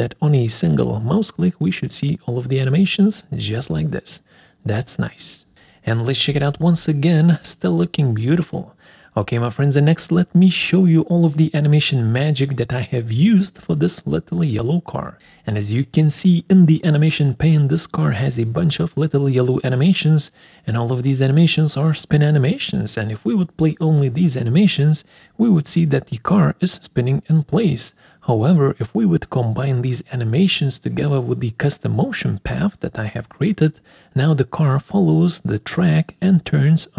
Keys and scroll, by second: 9.8 Escape, 14.5 1.